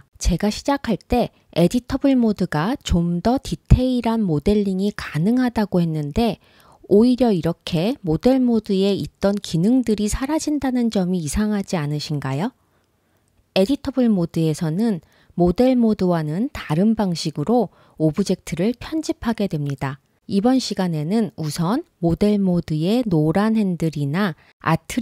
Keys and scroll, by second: 1.9 super+z, 2.2 super+z, 2.7 super+z, 16.4 super+z.